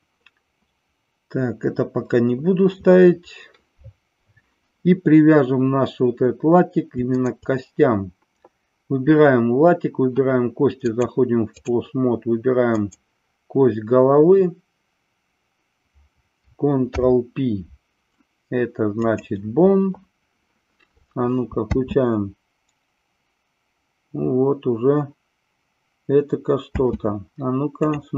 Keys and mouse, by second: 10.8-11.6 drag, 12.8-14.4 drag, 16.9 ctrl+p, 21.5 space, 26.6 space.